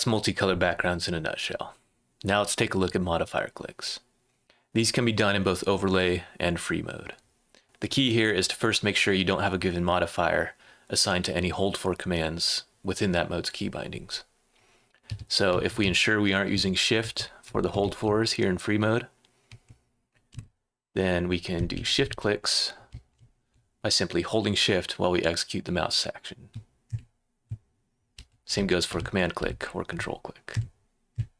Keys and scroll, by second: 15.5-18.3 typing, 19.4 l, 20.3 /, 22.6-23.9 typing, 26.8 space, 27.9-31.1 typing.